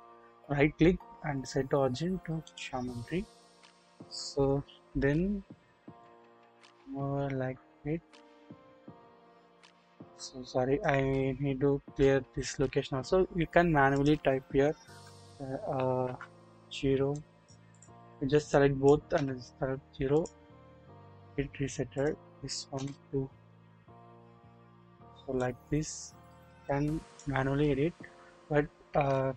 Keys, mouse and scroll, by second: 3.1-4.7 scroll up 1, 4.7 KP_7, 6.1-8.9 drag, 9.4-10.9 drag, 13.9-17.7 drag, 14.9 2, 16.0 BackSpace, 18.4-20.1 drag, 19.1 0, 21.9-23.3 drag, 23.3 Return, 24.3-25.4 scroll down 1, 25.4-27.2 drag, 28.9 ctrl+z, 28.9 ctrl+z.